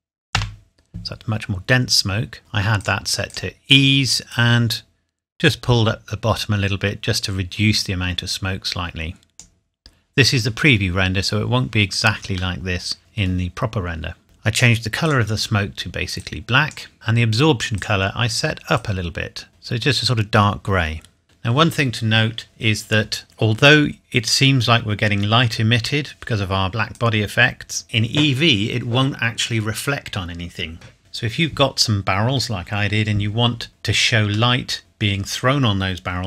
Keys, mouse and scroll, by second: 0.3 KP_Enter, 2.8 click, 12.5 middle click, 13.5-14.2 scroll up 1, 15.0 click, 16.5 scroll down 1, 16.9 middle click, 17.7 click, 26.9 click, 33.7-34.5 scroll down 1, 34.5 middle click.